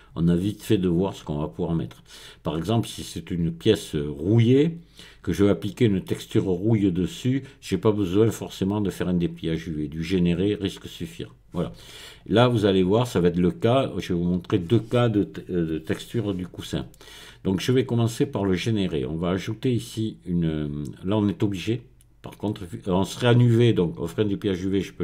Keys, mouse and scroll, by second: 19.6 click.